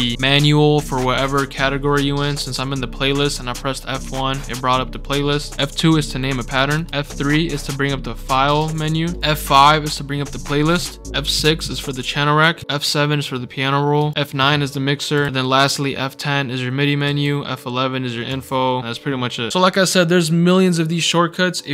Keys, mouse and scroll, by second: 0.1-2.5 drag, 6.7 click, 6.9 F3, 8.3 F3, 8.6 F3, 9.1 F5, 12.6 F6, 14.0 F7, 14.2 scroll down 2, 17.0 F11, 19.5 Num_Lock.